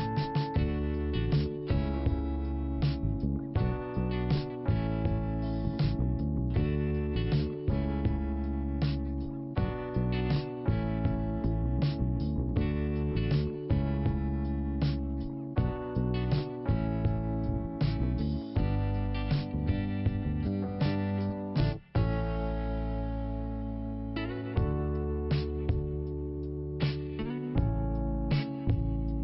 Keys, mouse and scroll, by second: 0.1 middle click, 0.8 click, 1.7 click, 3.8 click, 5.4 middle click, 6.3 click, 8.8 click, 10.9-11.8 scroll down 2, 11.8 click, 11.8 click, 12.6 middle click, 13.7 scroll up 2, 14.1 middle click, 14.8 scroll up 1, 15.4 click, 15.4 click, 15.9 click, 16.9 click, 17.0 click, 17.6 click, 17.6 click, 17.9 click, 18.0 click, 18.4 click, 20.0 middle click, 21.3 click, 21.4 click, 21.9 click, 23.9 click, 25.5 middle click, 26.5 click, 26.6 click, 27.4 click.